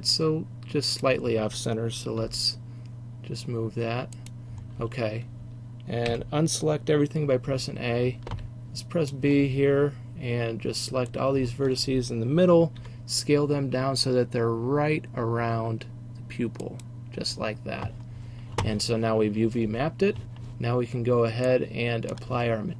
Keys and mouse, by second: 2.3 click, 2.3 g, 6.2 a, 12.9 s, 21.8 click, 22.2-22.7 middle drag.